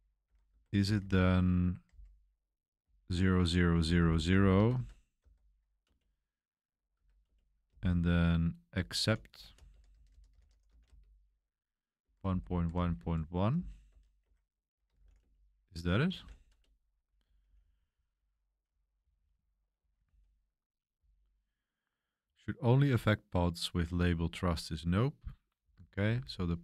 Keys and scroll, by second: 0.0-5.2 typing, 5.8 Return, 6.9-24.1 typing, 7.2 Return, 14.2 Escape, 25.3-26.6 typing.